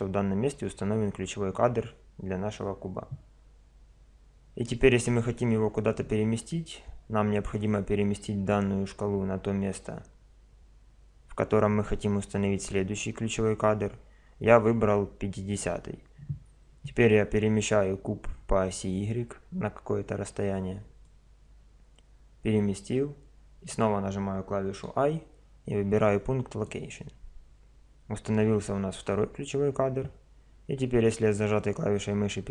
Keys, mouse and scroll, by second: 7.6 click, 17.7-19.5 drag, 24.7 i, 31.4-32.5 drag.